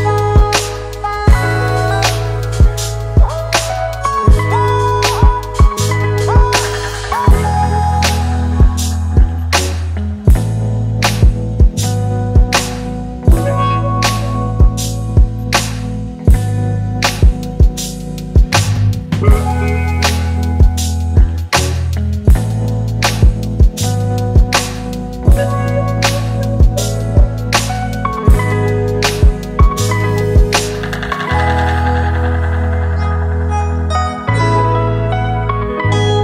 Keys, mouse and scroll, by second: 10.4 Return, 22.2 right click, 28.2 ctrl+=, 28.8 ctrl+=, 29.6 space.